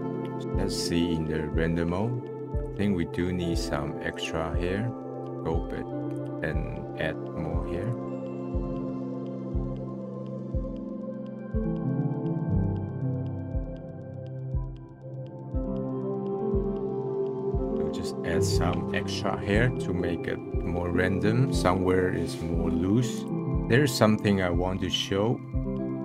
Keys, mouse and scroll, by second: 0.0-0.4 scroll down 1, 0.4-2.4 middle drag, 2.4 scroll up 1, 2.5 click, 2.8-4.1 middle drag, 4.1-5.2 drag, 6.1-8.4 drag, 8.4 middle click, 8.5 drag, 8.6 middle click, 8.8 ctrl+z, 9.3-9.8 drag, 9.8 middle click, 9.9 drag, 10.2-10.7 middle drag, 10.8 click, 10.9-11.4 middle drag, 11.4-11.8 drag, 11.8 middle click, 13.0 middle click, 13.3 drag, 13.5 scroll down 1, 13.7 middle click, 13.8 scroll up 1, 13.9 scroll down 1, 13.9 middle click, 14.2 click, 14.6 click, 14.6 middle click, 14.8 click, 14.8 middle click, 14.9 scroll down 1, 15.0 middle click, 15.4 ctrl+z, 15.5 middle click, 15.7 `, 16.3 click, 16.4 middle click, 16.6-17.1 drag, 17.1 middle click, 17.3 scroll down 1, 17.4 middle click, 17.5 click, 17.6-21.3 middle drag, 21.4-23.2 middle drag, 23.2 click, 24.9 scroll down 2.